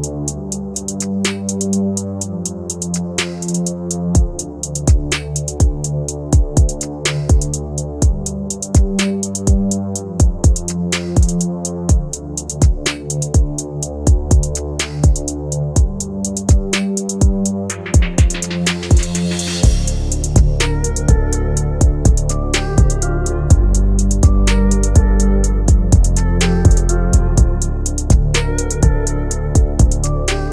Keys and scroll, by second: 3.3 shift+F2, 3.6 Escape, 8.0 F3, 8.3 Escape, 9.5 Delete.